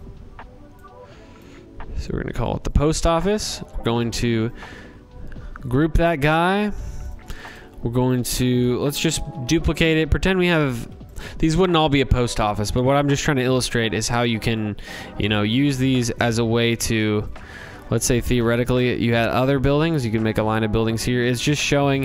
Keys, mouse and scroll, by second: 1.7 click, 2.9 click, 3.4 right click, 6.0 click, 6.5 click, 7.0 click, 8.2 ctrl+c, 8.5 ctrl+v, 9.2 ctrl+v, 10.1 click, 12.1 click, 13.5 click, 15.6 click, 16.2 click, 17.5 click, 17.7 click, 20.6 click, 21.6 click.